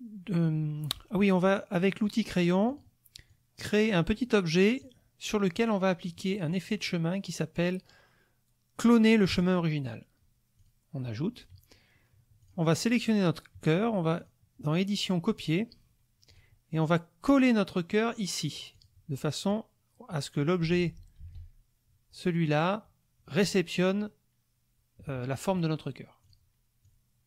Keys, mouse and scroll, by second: 2.7 click, 3.3-5.0 drag, 6.5 click, 9.3 click, 10.6 click, 12.4 click, 13.0 click, 14.2 click, 15.4 click, 16.3 click, 18.7 click, 19.5-20.4 drag, 20.8 ctrl+z, 26.2 click, 26.8 click.